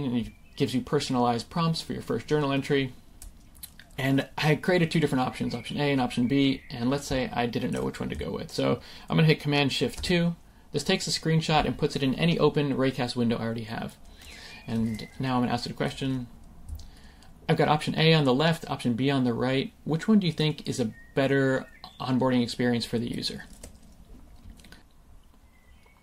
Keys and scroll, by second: 9.9 shift+super+2, 24.7 super+v.